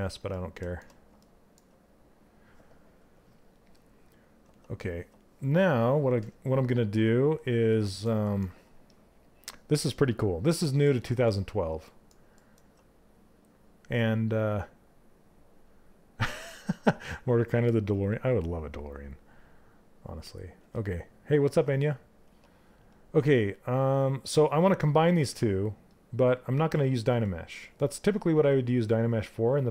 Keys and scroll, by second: 21.8 2.